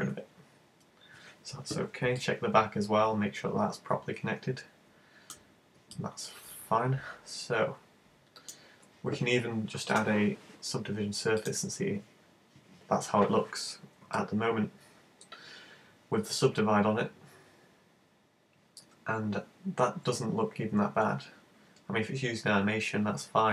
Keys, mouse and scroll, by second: 0.0-0.8 scroll down 13, 0.8-1.9 scroll up 3, 2.2 middle click, 5.5-6.1 scroll down 4, 5.9 middle click, 7.3 middle click, 10.0 click, 14.2 middle click.